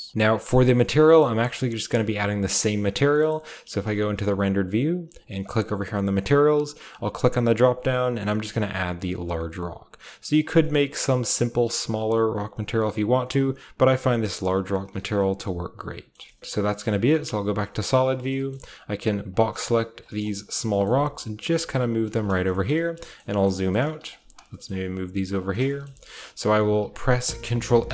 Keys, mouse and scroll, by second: 0.1 ctrl+b, 0.4-2.8 shift+middle drag, 0.4-0.9 shift+scroll up 1, 0.9-2.8 shift+scroll up 1, 3.0-4.2 shift+right drag, 3.6 z, 4.1 z, 5.8 middle click, 5.9-6.8 drag, 6.8 middle click, 6.9-8.4 drag, 8.4 middle click, 8.5-9.0 drag, 9.0 middle click, 9.7 middle click, 10.2 middle click, 10.6-10.9 scroll up 1, 10.9 middle click, 11.9 middle click, 13.1 middle click, 14.0 middle click, 14.0-18.0 typing, 14.6 middle click, 15.1-15.6 middle drag, 16.3 shift+scroll up 1, 16.5-17.6 shift+middle drag, 17.6-18.9 scroll down 1, 18.3 shift+middle drag, 19.3-20.0 shift+drag, 20.6-21.0 typing, 20.8-22.3 shift+scroll up 1, 21.8 click, 22.1-24.4 typing, 22.3-23.2 scroll down 1, 22.5-23.3 shift+middle drag, 23.2-23.8 shift+scroll up 1, 23.3 drag, 23.7 middle click, 24.1-26.7 shift+drag, 24.6-25.3 shift+scroll up 1, 25.4 typing, 25.8-27.2 shift+scroll up 1, 26.5 typing, 27.2-27.8 ctrl+scroll up 1.